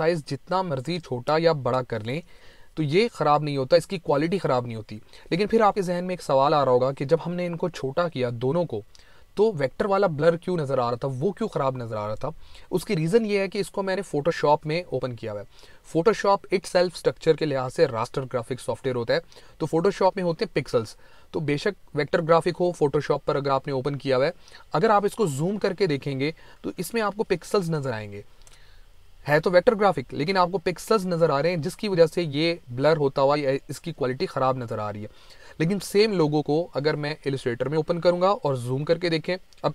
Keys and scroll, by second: 25.8 ctrl+=, 27.4 space, 28.8 ctrl+=, 30.2 ctrl+=, 34.0 ctrl+-.